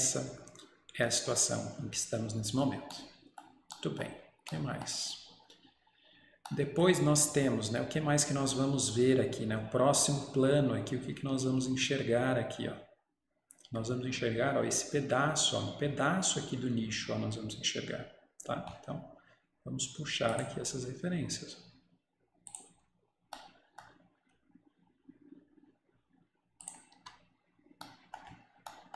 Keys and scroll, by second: 27.0 Escape.